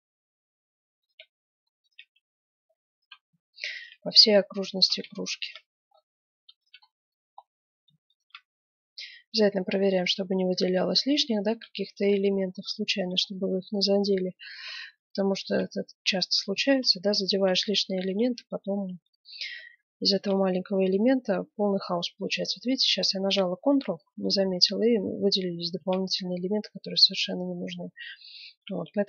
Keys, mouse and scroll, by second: 0.0 middle click, 1.7 right click, 3.7 right click, 5.6-7.8 right drag, 7.0 click, 8.6 right click, 9.1 middle click, 10.2 middle click, 11.1-12.7 middle drag, 12.7 click, 13.2 middle click, 14.9-19.7 right drag, 15.9-19.5 drag, 18.8-20.7 middle drag, 20.7-21.8 right drag, 21.6-23.4 middle drag, 23.6-25.5 middle drag, 25.7 ctrl+z, 26.3-27.4 middle drag.